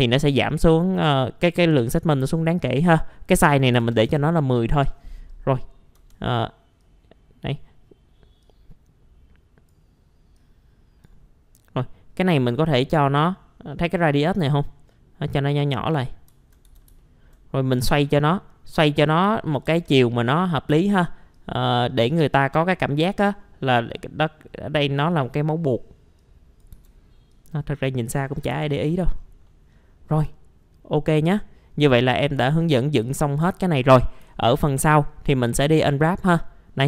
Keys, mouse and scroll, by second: 2.6 click, 3.7 KP_1, 4.5 middle click, 4.8 scroll down 1, 5.9 e, 6.8 click, 9.4 click, 12.7-14.0 scroll up 1, 14.0-16.3 drag, 16.7 alt+w, 17.0 alt+middle click, 17.8 click, 19.3 alt+middle click, 20.3 scroll down 1, 21.3-27.3 drag, 28.4-29.3 scroll down 2, 28.5 F4, 29.5-31.3 middle drag, 32.1-33.3 drag, 33.5 alt+middle click, 34.3 alt+middle click, 36.4 middle click.